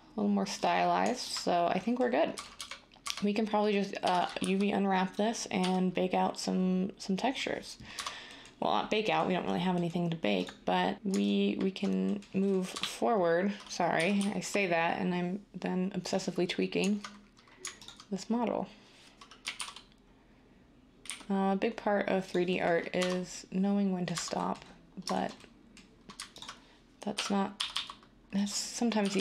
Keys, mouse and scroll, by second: 2.4-5.6 typing, 7.9 Tab, 12.7 7, 13.9 typing, 19.4 typing, 21.0 g, 22.9 Tab, 24.1 Tab, 27.1-27.5 typing, 29.0 g, 29.1 g.